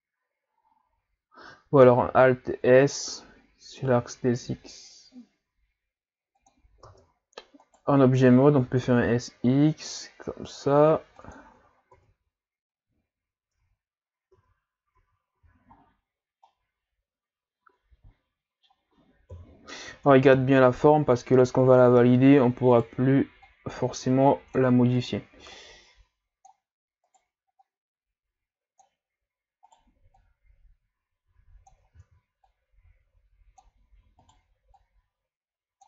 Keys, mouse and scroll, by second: 2.0 alt+s, 6.9 Tab, 7.7 right click, 8.6 s, 11.9 Tab, 13.6 Tab, 14.3 Tab, 15.0 Tab, 15.4 a, 15.7-16.5 scroll down 5, 16.5-19.3 middle drag, 19.3 KP_3, 20.3 KP_1, 21.2-21.9 scroll up 4, 21.9 Tab, 22.7 right click, 23.5-25.0 drag, 25.0 right click, 25.5-27.1 drag, 27.1 right click, 27.6-29.6 drag, 29.6 right click, 30.2 click, 32.0 ctrl+z, 32.5-34.2 drag, 34.2 right click, 34.8-35.8 drag.